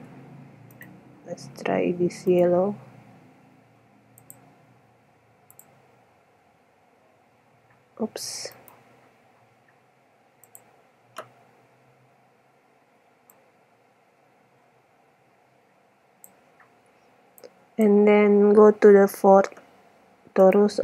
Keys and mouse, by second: 0.0 Escape, 0.9-1.3 drag, 2.9 right click, 9.0-10.6 drag, 10.6 middle click, 10.7-11.4 drag, 15.7 middle click, 17.6-19.3 drag, 20.4-20.8 right drag.